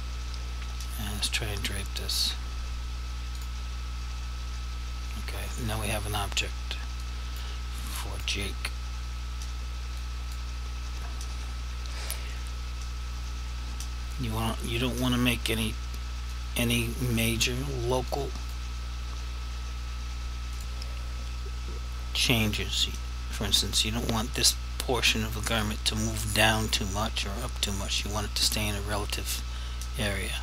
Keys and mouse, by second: 3.4 click, 7.1 click, 8.1 click, 10.1 click, 16.4 click, 18.2 click, 20.6 click, 24.6 click.